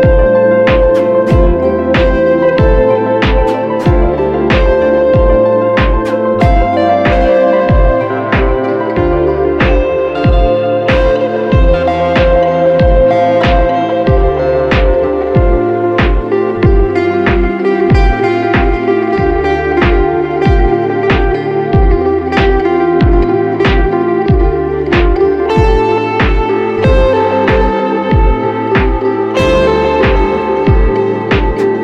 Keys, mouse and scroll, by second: 26.7 double click, 27.7 ctrl+t.